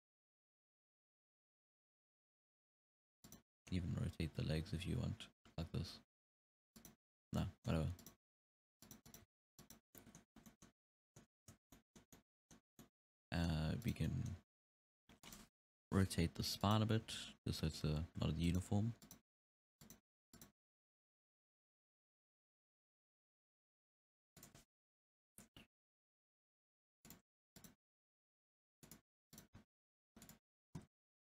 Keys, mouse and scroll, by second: 3.5 middle click, 3.9 r, 7.4-8.0 middle drag, 8.0 right click, 8.2 r, 9.1 right click, 9.3 r, 9.8 scroll down 1, 10.0-10.3 middle drag, 10.3 scroll up 1, 10.5-10.9 middle drag, 10.9 scroll down 1, 11.0-11.7 middle drag, 11.7-12.1 scroll up 1, 12.1-13.9 middle drag, 13.9 right drag, 14.1-14.6 middle drag, 14.6 r, 15.7 KP_7, 16.7 right click, 17.1 r, 19.1-19.4 right drag, 19.4 r, 20.4 right click, 20.7 r, 25.1 KP_3, 25.8 t, 26.3 r, 27.6 right click, 27.9 g, 29.4 right click, 29.6 g, 31.0 alt+a.